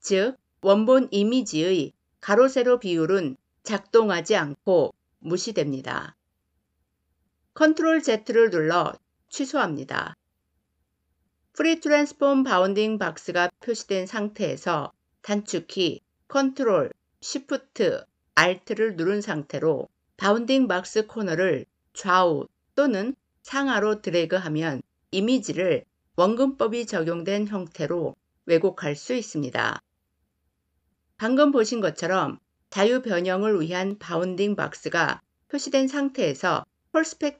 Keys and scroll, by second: 7.6 ctrl+z.